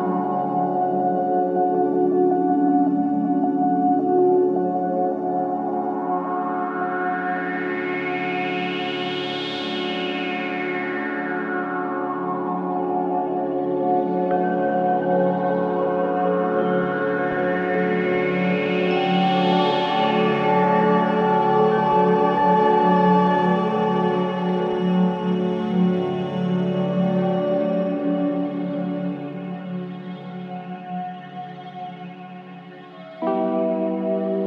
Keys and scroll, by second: 17.2 ], 18.1 ], 23.3 ], 23.9 ], 24.5 ].